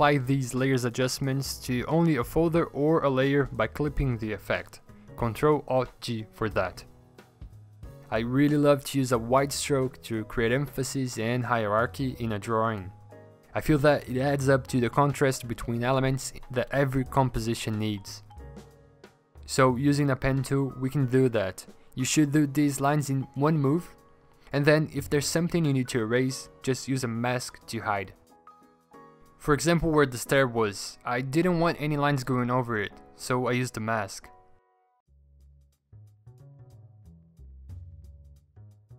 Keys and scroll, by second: 0.4 p, 5.1 ctrl+z, 8.1-8.4 scroll, 10.3 scroll, 18.1 ctrl+z, 19.4 ctrl+z, 20.0 v, 20.5 p, 25.2 v, 28.8 b, 32.6-34.3 scroll, 38.4 p.